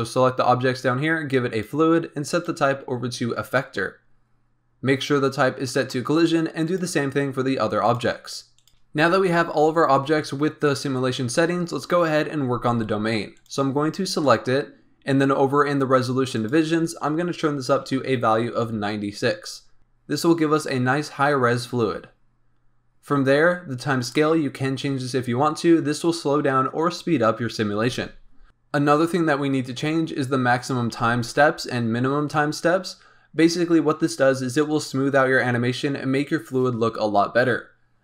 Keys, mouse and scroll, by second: 1.5 click, 2.3-4.1 drag, 4.1-6.6 scroll up 1, 6.6 click, 7.8 click, 8.5 click, 13.3 click, 16.3-19.4 drag, 28.4-30.3 scroll up 3.